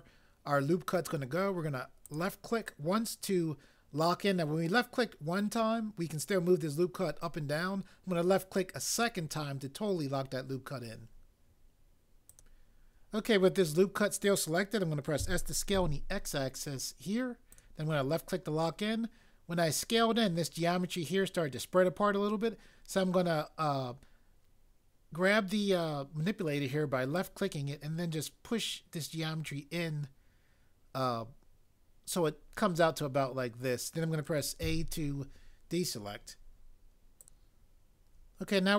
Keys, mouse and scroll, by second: 15.2 s, 15.7 x, 34.6 a.